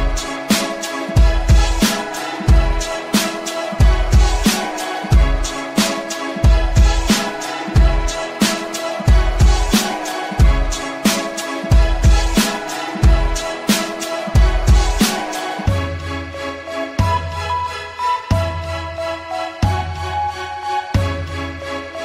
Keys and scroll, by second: 5.8 F3, 10.3 shift+F2, 10.8 Escape, 12.6 Escape, 14.0 ctrl+k, 14.8 Escape, 17.7 BackSpace, 18.6 l, 19.2 space.